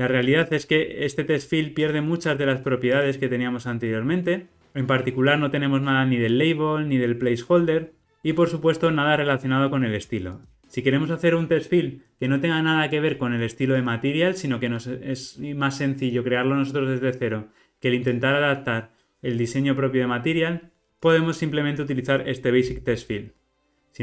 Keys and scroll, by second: 1.9 super+b, 9.0 alt+super+[, 22.7 ctrl+r.